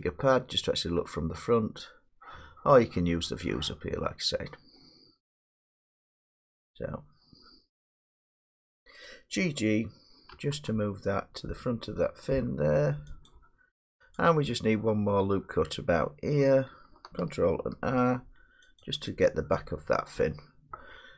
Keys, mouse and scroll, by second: 10.3 g, 10.5 g, 13.3 click, 14.3 click, 17.7 ctrl+r, 18.8 click, 19.3 click.